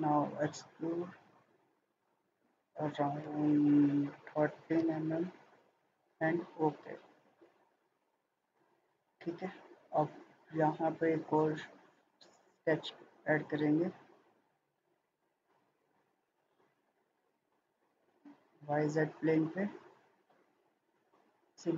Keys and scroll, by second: 4.1-4.4 typing, 4.8 Return.